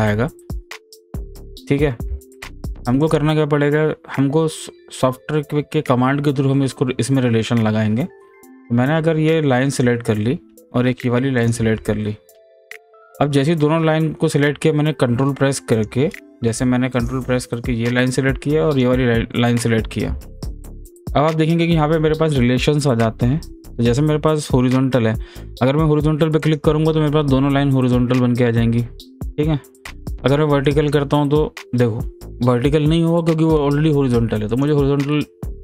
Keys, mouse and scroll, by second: 1.0-2.1 drag, 2.1 ctrl+z, 3.0 click, 9.7 click, 15.7 click, 26.4 click, 30.6 click, 34.5 click.